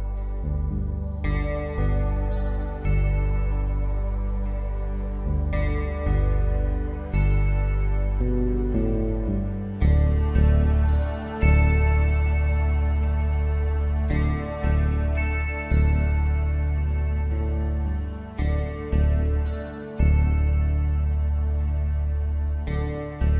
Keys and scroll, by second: 1.1 8, 1.3 Return, 4.2 alt+Delete, 4.9 ctrl+d, 5.2 v, 6.1 w, 7.9 ctrl+i, 17.2 space, 19.5 space, 22.8 ctrl+z.